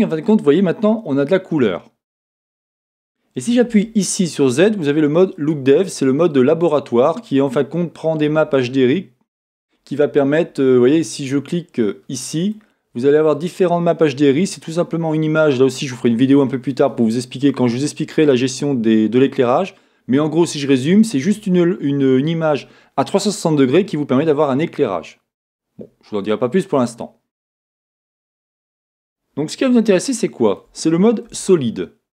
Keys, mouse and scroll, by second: 1.0-3.7 middle drag, 3.7 z, 12.4-30.1 drag, 30.1-31.2 shift+middle drag, 31.2 z.